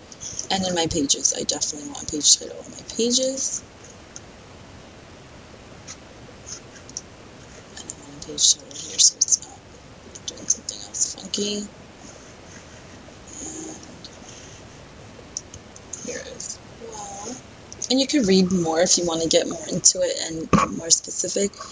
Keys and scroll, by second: 0.6 super+v, 10.1 super+v, 15.9 super+v.